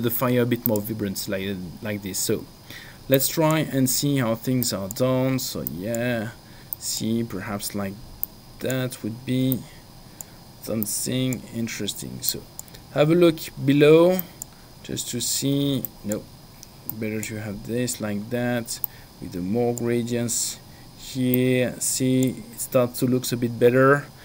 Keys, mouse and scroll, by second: 0.7 click, 3.2 click, 4.7 click, 6.9 click, 8.3 click, 9.6 click, 10.9 click, 12.4 click, 14.6 click, 16.2 click, 19.0 click, 21.8 click.